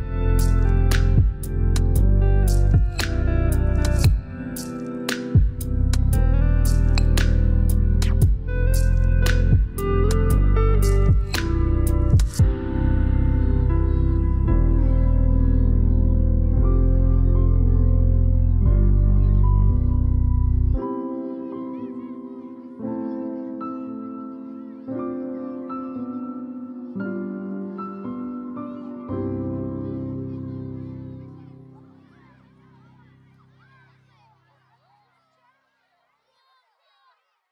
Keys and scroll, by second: 31.2 5.